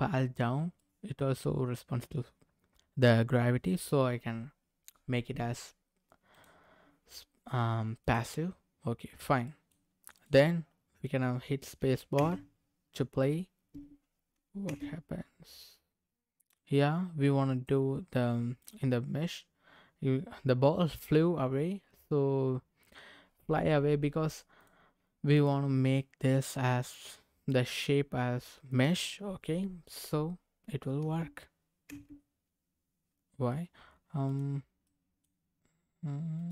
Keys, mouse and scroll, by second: 0.8 middle click, 6.3 click, 8.0 click, 9.2 scroll down 1, 9.4 middle click, 10.1 click, 12.2 space, 14.7 space, 16.5-17.7 drag, 18.6 click, 20.6-21.6 scroll down 3, 24.6 click, 25.3 click, 26.8-29.0 drag, 31.0 space, 31.9 space, 34.2 click, 34.9 middle click, 35.5-36.4 scroll up 1, 36.4 click, 36.4 scroll up 1.